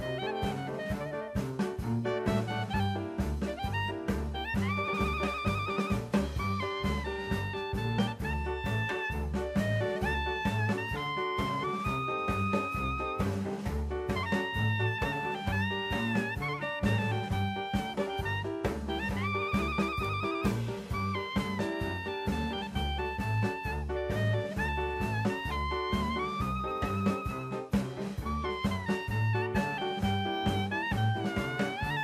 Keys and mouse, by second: 1.0 click, 2.0 click, 2.9 middle click, 3.6-3.9 middle drag, 9.0 click, 12.0 click, 12.9-15.3 drag, 18.2 middle click, 19.9-20.2 shift+middle drag, 21.3 shift+middle drag, 22.2 shift+middle drag, 22.7 click, 23.3 Tab, 25.2 3, 25.6 click, 30.5 click, 31.7 click.